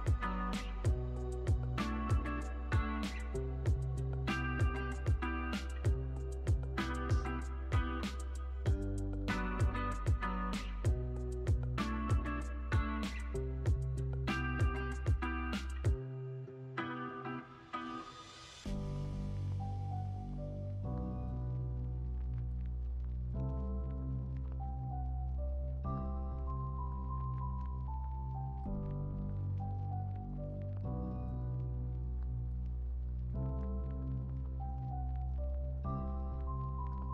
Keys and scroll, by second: 5.0 z, 5.8 super+c, 6.2 super+v, 32.1 x, 34.0 z, 34.7 x, 36.8 z.